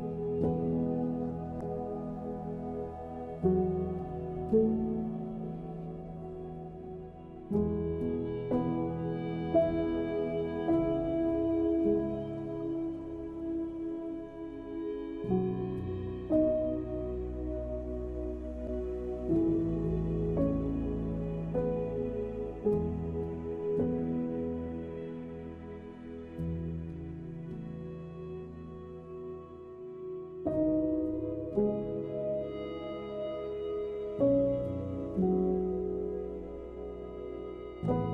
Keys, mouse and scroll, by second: 0.1 middle click, 1.1 alt+shift+click, 1.3 middle click, 1.7 s, 2.4 middle click, 2.9 s, 4.0 middle click, 4.6 middle click, 4.9 scroll up 1, 5.1 Tab, 5.8 ctrl+2, 6.0 scroll up 1, 6.0 middle click, 6.2 scroll down 1, 6.4 middle click, 7.3 right click, 7.8 middle click, 8.1 Tab, 8.2 middle click, 9.5 ctrl+r, 11.0 middle click, 11.8 ctrl+r, 13.3 Tab, 13.5 middle click, 14.0 Tab, 15.3 ctrl+r, 16.7 middle click, 17.4 ctrl+r, 18.6 Tab, 18.8 scroll down 1, 18.9 middle click, 19.3-19.8 scroll up 2, 19.5 middle click, 19.8 Tab, 20.0 middle click, 21.4 alt+click, 22.3 e, 23.0 s, 24.0 m, 24.5 middle click, 25.2 middle click, 26.0 alt+click, 26.7 e, 27.0 s, 27.6 m, 28.0 middle click, 28.6 ctrl+r, 30.3 middle click, 31.1 ctrl+r, 33.5 Tab, 33.7 middle click, 34.5 shift+middle click, 35.3 ctrl+s, 35.5 middle click, 36.3 KP_1, 36.5 middle click, 37.1 KP_1, 37.5 Tab, 37.8 Tab, 38.0 click.